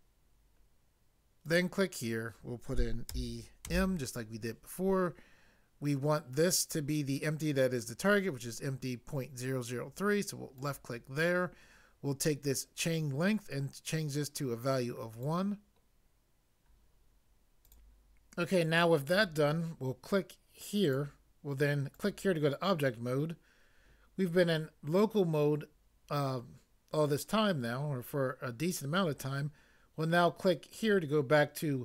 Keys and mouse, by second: 3.1 e, 3.7 m.